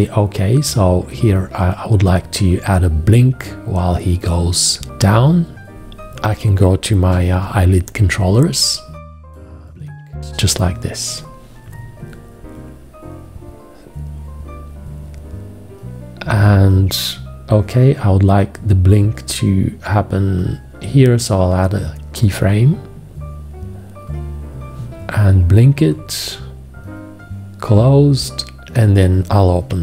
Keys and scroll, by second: 5.7 space, 6.9 g.